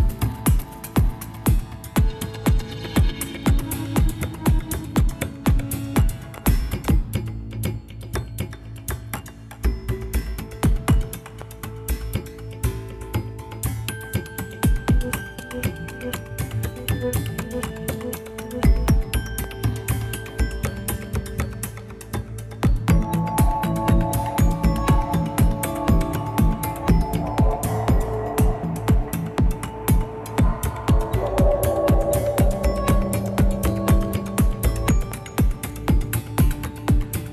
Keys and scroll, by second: 4.1 Return, 7.0 Left, 7.2-7.6 Left, 7.9 Left, 8.0 Left, 8.2 Left, 8.4 Left, 12.3 ctrl++, 12.4 ctrl++, 14.7 ctrl++, 22.3 ctrl+alt+shift+-, 22.4 ctrl+alt+shift+-, 22.5 ctrl+alt+shift+-, 22.6 ctrl+alt+shift+-, 25.8 ctrl+c, 26.1 ctrl+v, 31.3 ctrl++, 33.0-34.0 Right, 34.1 Right, 36.6 ctrl+Right, 37.1 ctrl+Right.